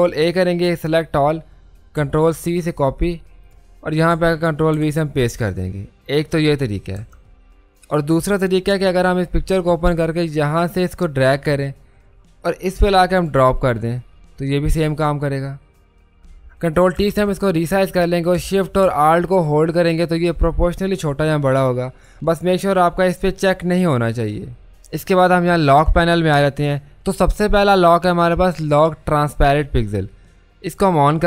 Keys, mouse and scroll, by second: 2.0 ctrl+c, 3.4 click, 4.7 ctrl+v, 10.4-16.5 drag, 17.0 ctrl+t, 20.5-22.1 alt+shift+drag, 22.1 typing, 30.7 click, 30.7 typing.